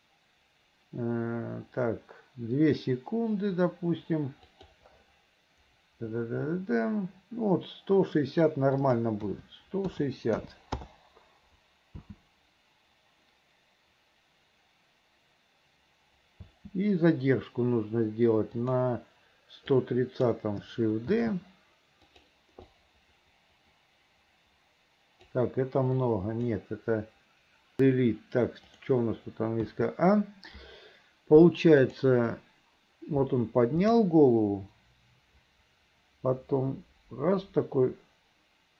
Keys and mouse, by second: 8.9-10.9 drag, 12.1 space, 16.5 space, 18.7 click, 19.9 click, 21.3 shift+d, 22.8-25.4 drag, 26.1 click, 27.8 Delete, 28.8 click, 29.7 a, 31.9 click, 32.4-38.7 drag.